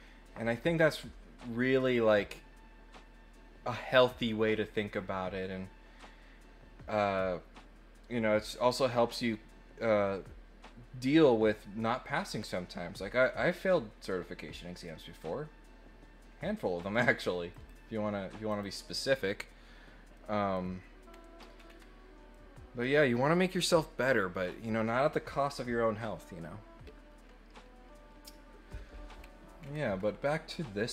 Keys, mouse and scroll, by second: 17.5 click, 18.5 click, 20.1 middle click, 21.1 scroll down 1, 21.5 scroll up 2, 22.3 middle click, 22.7 middle click, 29.2-29.6 scroll down 4, 29.9 scroll up 2, 30.2-30.9 middle drag.